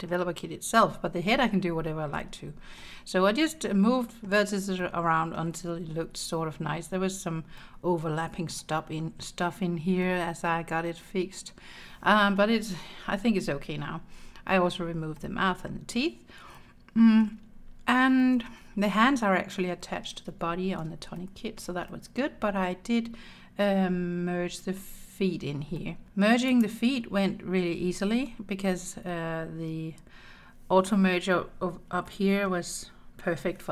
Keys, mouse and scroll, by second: 2.2 middle click, 3.5 middle click, 4.8 middle click, 5.9-7.3 scroll up 5, 7.6 middle click, 10.0-12.4 middle drag, 15.2 middle click, 15.7-16.6 scroll down 4, 16.6 middle click, 17.5-18.0 scroll down 2, 18.2 shift+middle click, 20.5-20.9 scroll down 2, 21.2 shift+middle click, 21.9 middle click, 22.5-23.3 scroll up 4, 25.8 middle click, 26.0 Tab, 26.5 click, 27.3 Tab, 32.1 middle click.